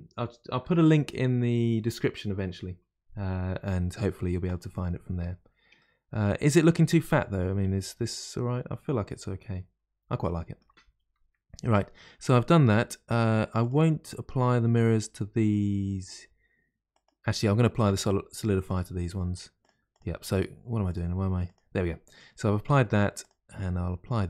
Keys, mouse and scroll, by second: 5.7-8.9 middle drag, 13.6 click, 16.9 click, 18.6 click, 19.6 click, 19.9 click, 20.3 click, 20.9 click, 21.4 click, 22.5-23.2 middle drag, 23.2 click.